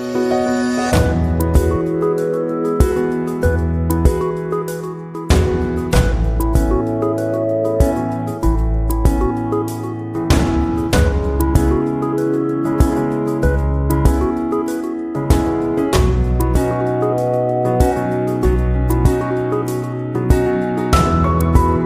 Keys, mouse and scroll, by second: 0.3-2.0 drag, 6.4 click.